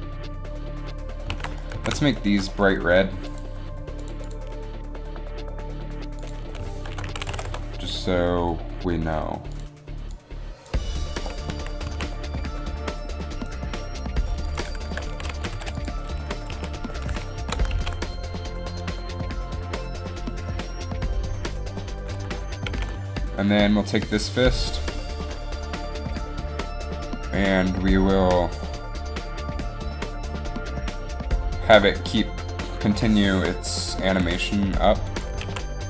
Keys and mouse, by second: 1.6 alt+a, 1.8 z, 5.5-11.4 drag, 11.7 z, 12.0 a, 13.5 right click, 16.8 a, 17.6 shift+Left, 17.9 alt+a, 23.0 alt+a, 34.2 Delete, 34.5 Delete, 35.5 alt+a.